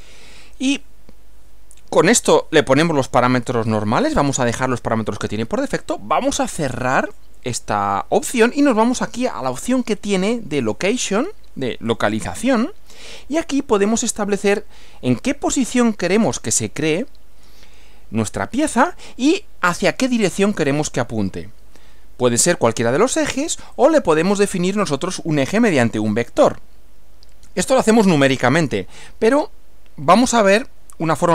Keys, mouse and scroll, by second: 7.0 click, 11.9 click, 20.4 click, 23.8 click.